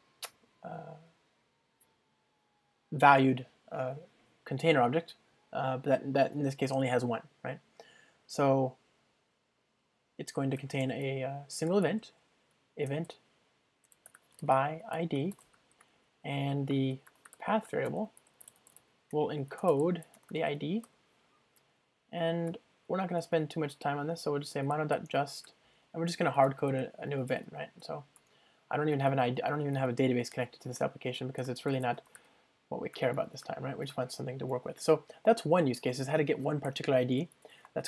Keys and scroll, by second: 17.8 Return, 22.5 Return, 25.5 Return, 29.9 super+p, 33.9 Return, 34.0 alt+super+l.